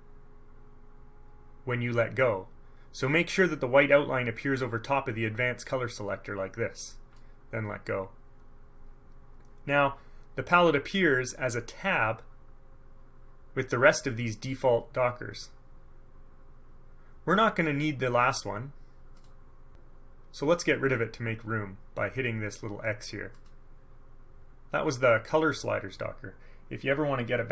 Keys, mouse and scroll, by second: 4.4-7.5 middle drag, 19.3 click, 23.5 click.